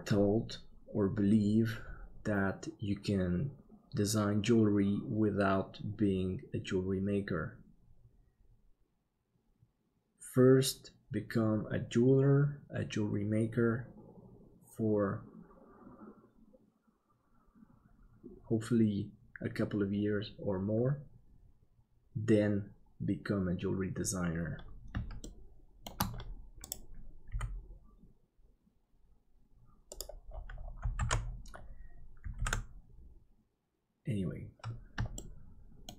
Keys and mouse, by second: 25.2 shift+middle click, 27.3 g, 31.0 alt+a, 32.6 ctrl+s, 35.1 shift+middle click.